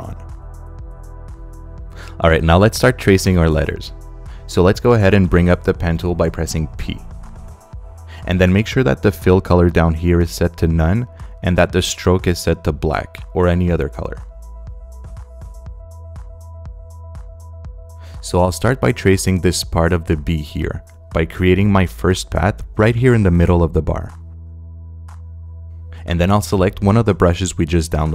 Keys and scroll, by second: 1.9 space, 5.9 p, 14.0 space.